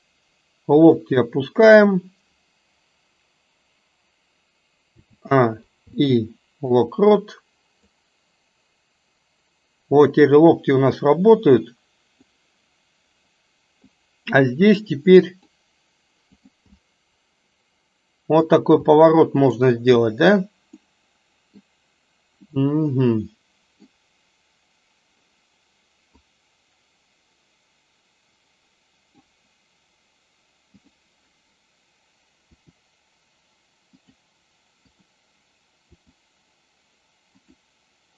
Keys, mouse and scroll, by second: 5.0 a, 5.8 i, 7.9-12.4 drag, 14.0-14.5 drag, 15.2 click, 16.4 click, 16.8-18.6 middle drag, 19.0 middle click, 20.8 middle click, 22.5-24.0 middle drag, 26.4-29.3 drag, 30.9 drag, 32.5 r, 34.9 click, 35.9 r.